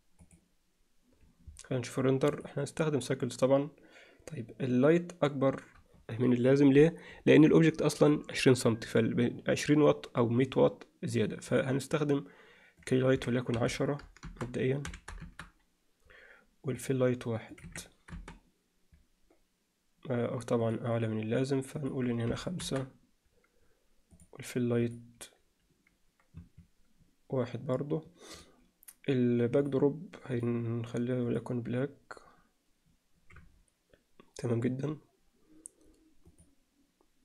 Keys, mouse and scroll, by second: 2.6 click, 11.5 click, 12.8-16.2 drag, 16.8 click, 17.6-20.2 drag, 20.6 click, 21.9-23.6 drag, 24.9-27.6 drag.